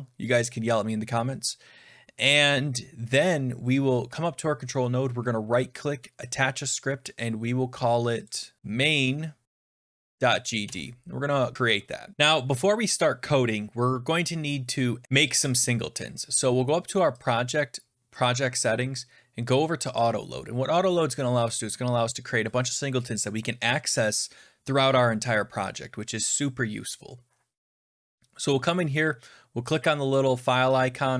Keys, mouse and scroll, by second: 1.8-2.8 scroll down 11, 3.7 scroll down 1, 4.7 right click, 6.2 click, 6.2 scroll, 8.2 click, 8.3-10.2 typing, 9.4 click, 10.5 Return, 12.1 click, 17.1 click, 18.1 click, 19.9 click, 29.7 click.